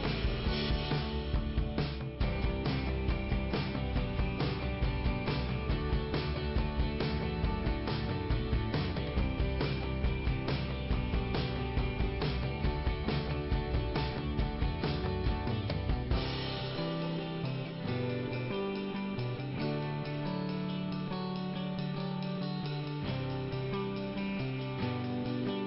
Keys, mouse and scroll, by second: 0.6 click, 0.8 click, 0.9 double click, 4.0 click, 6.4 click, 11.3 click, 11.6 right click, 11.8 double right click, 15.8 click, 15.9 click, 16.0 double click, 20.3 scroll down 2, 22.2 middle click, 24.1 scroll up 2, 25.3 middle click.